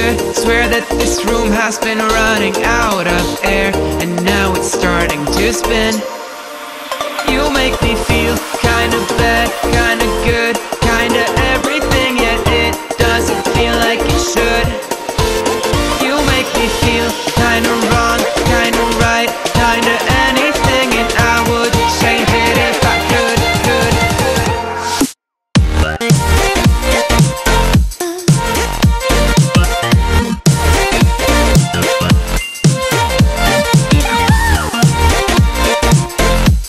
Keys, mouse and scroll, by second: 1.2 space, 1.3 click, 1.5 space, 2.6-3.8 click, 3.7-4.3 space, 5.2-8.0 drag, 12.0 Down, 12.3 Right, 13.4-15.2 drag, 16.0-18.5 drag, 18.9 Left, 19.5-21.5 drag, 21.7 Left, 22.5 Up, 22.8 Left, 23.3 click, 24.4 ctrl+-, 27.5-28.2 drag, 29.1-30.5 drag, 32.5 right click, 33.3 click.